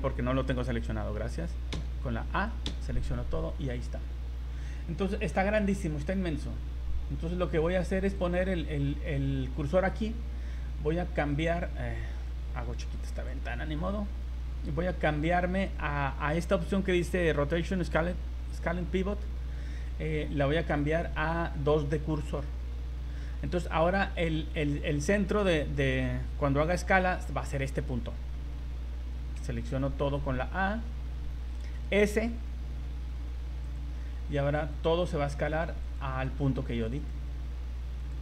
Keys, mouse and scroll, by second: 1.7 a, 2.7 a, 3.6 scroll down 4, 4.1-4.4 scroll up 9, 4.8-5.6 scroll down 9, 5.9-7.4 scroll up 13, 8.1 click, 12.2 click, 13.7 scroll, 20.8 click, 28.4 s, 29.4 a, 30.8-31.4 scroll, 32.6 s, 34.2 s, 35.3 s, 36.4 s, 37.5 s.